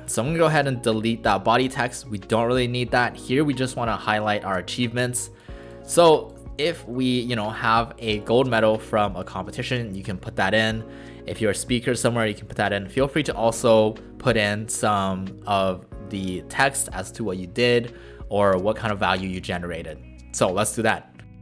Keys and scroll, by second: 1.6 Delete, 21.1-21.4 typing.